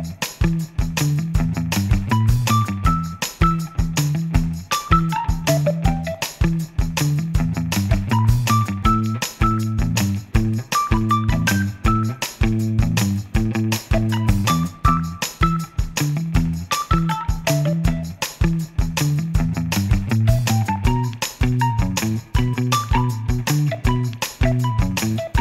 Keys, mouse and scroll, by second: 0.2-0.5 scroll down 1, 0.5-0.8 scroll up 1, 0.8-5.0 middle drag, 6.0 click, 6.6-12.2 drag, 15.8-18.1 drag, 19.0 click, 20.2 click, 20.5 right click, 21.4 click, 21.9-22.3 scroll up 2, 22.3-25.4 middle drag.